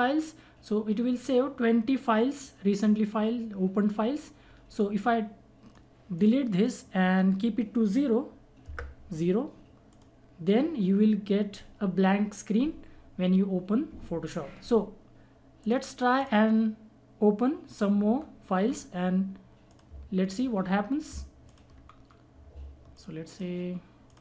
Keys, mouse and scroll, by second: 4.7-9.9 drag, 15.6 click, 18.1 scroll down 1, 19.7 click, 21.4 ctrl+click, 21.8 scroll down 1, 22.9 ctrl+click.